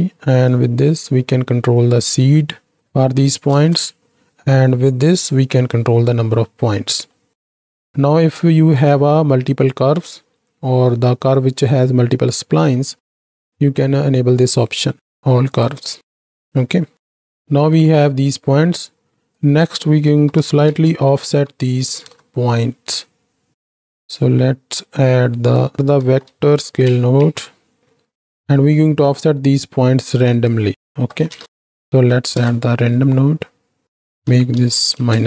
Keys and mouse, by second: 0.5-3.5 drag, 7.2 middle click, 15.5 click, 17.1 middle click, 17.6 middle click, 19.3-23.5 drag, 23.8 middle drag, 24.1 click, 25.5-28.3 drag, 28.3 x, 28.5 middle click, 30.1-35.0 drag.